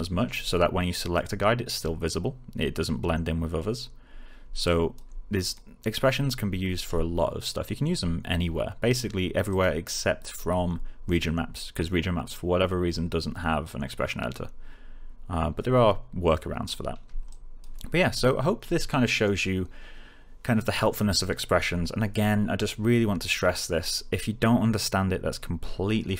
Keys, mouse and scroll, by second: 4.6-5.2 alt+click, 9.4 click, 10.6 scroll down 1, 17.4-17.8 alt+click.